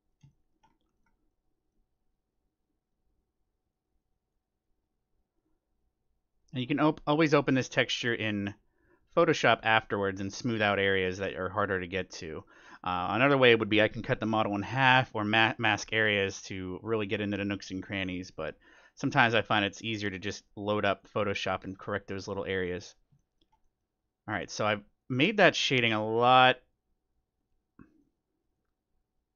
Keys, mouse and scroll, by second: 2.1-14.6 drag, 3.1 middle click, 7.9 scroll down 1, 8.1-10.1 middle drag, 11.0-12.9 middle drag, 15.2-17.0 middle drag, 15.8-23.8 drag, 17.8 scroll down 1, 18.0-20.5 middle drag, 22.2-25.3 middle drag, 24.0-29.3 drag.